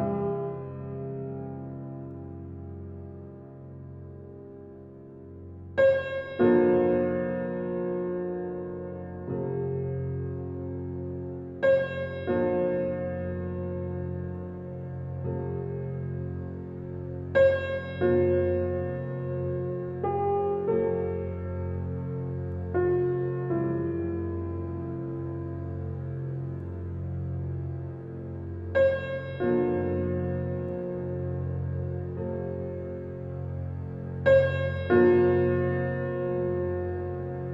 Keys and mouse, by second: 0.5 alt+shift+click, 3.2-7.3 shift+drag, 10.1 ctrl+s, 11.1-12.0 ctrl+alt+drag, 12.3-14.7 drag, 15.4 click, 16.3 ctrl+alt+click, 17.2 click, 17.5 click, 18.5 alt+a, 20.3-20.9 drag, 21.8 0, 23.1 click, 24.2-27.4 ctrl+alt+drag, 28.0 alt+shift+click, 28.4 alt+click, 29.5 alt+shift+click, 31.4 alt+click, 32.7 ctrl+s, 33.6 typing, 36.7-37.5 alt+drag.